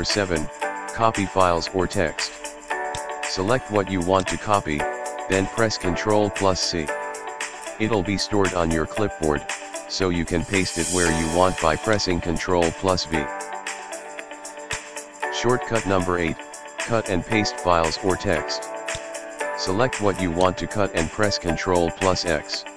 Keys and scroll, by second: 6.0 super+c, 13.1 super+v, 21.9 super+x.